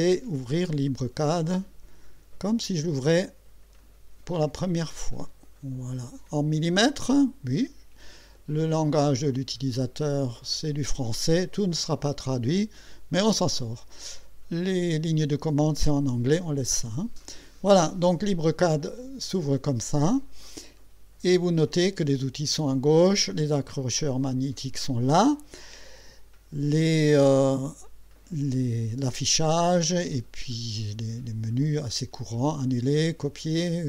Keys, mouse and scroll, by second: 0.9 click, 3.8 click, 5.0 click, 8.9 click, 10.8 click, 16.4 click, 19.4 click.